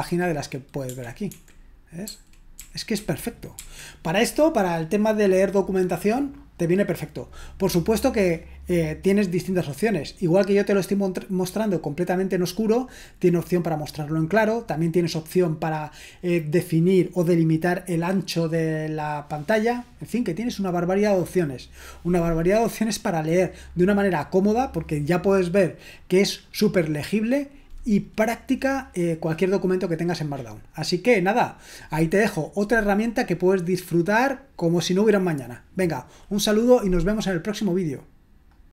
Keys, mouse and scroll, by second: 1.3-3.6 typing, 38.5 click.